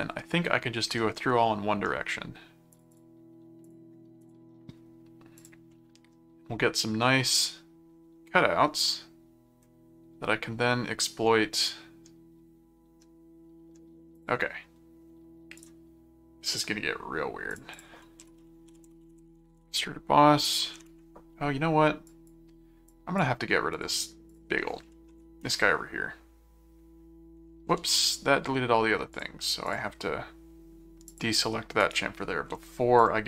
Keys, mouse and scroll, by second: 1.0 middle click, 2.7 click, 3.6 click, 5.4 click, 5.7-14.0 middle drag, 14.1 click, 15.5 right click, 17.5 click, 18.0-20.0 typing, 22.1 click, 22.9 click, 23.7 click, 25.4 Return, 27.8 ctrl+z, 29.1 click, 31.1 click, 31.8 right click, 33.0 click.